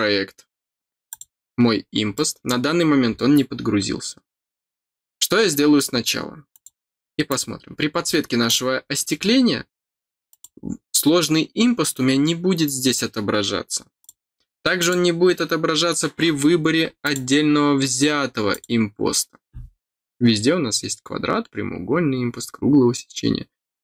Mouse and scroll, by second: 1.0 click, 1.8 scroll down 2, 2.1 middle click, 6.5 click, 7.2 click, 8.4 click, 10.2 click, 11.1 scroll down 2, 14.0 click, 14.7 click, 17.0 click, 18.5 click.